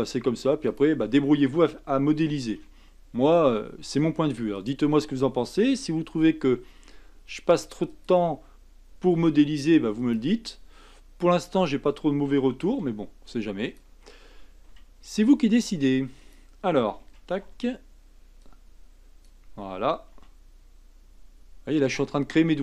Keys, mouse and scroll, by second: 2.4 shift+d, 6.1 s, 9.2 r, 12.7 b, 14.7 g, 17.0 a, 17.4 b, 20.1 g.